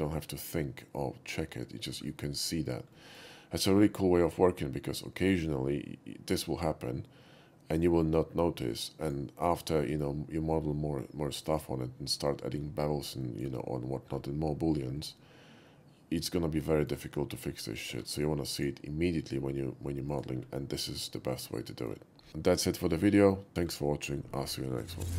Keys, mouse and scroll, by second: 3.0 middle click, 3.7 q, 4.3 click, 9.0 click, 9.7-10.1 middle drag, 13.2 shift+middle drag, 15.1-16.9 shift+middle drag, 17.6 middle click, 18.0 q, 18.6 click, 20.1 click, 21.2-21.9 middle drag, 23.5 shift+middle click.